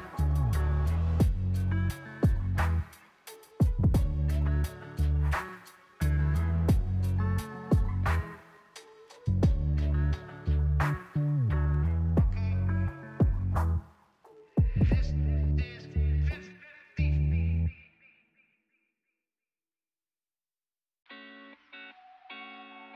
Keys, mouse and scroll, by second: 0.2 click, 1.6-3.6 middle drag, 3.6 click, 4.2-6.9 middle drag, 6.9 scroll down 2, 7.3 scroll up 1, 7.9 click, 8.5 ctrl+c, 9.3 click, 9.7 click, 10.1 ctrl+c, 10.3 ctrl+v, 10.6-11.7 middle drag, 11.7 click, 12.2 s, 13.7-15.3 middle drag, 15.3 click, 16.9 click, 18.1 click, 19.1-21.3 middle drag, 21.3 ctrl+c, 21.5 ctrl+v, 21.9 click.